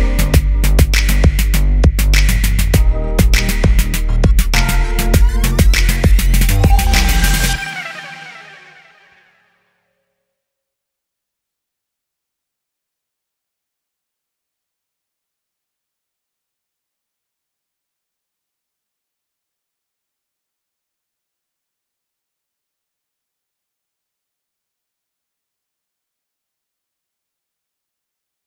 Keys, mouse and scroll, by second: 7.5 click.